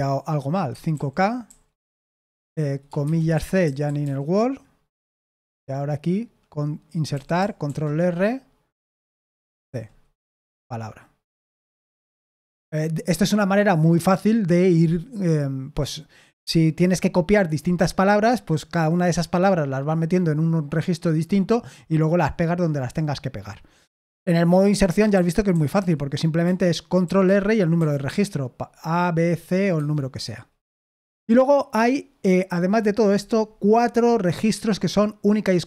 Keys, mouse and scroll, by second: 0.4-1.4 typing, 3.3-4.5 typing, 5.5 j, 7.1 i, 7.6 ctrl+r, 9.6 c, 11.3 Escape, 24.8-26.2 typing, 27.0 ctrl+r, 27.7 c, 29.7 Escape, 30.7 g.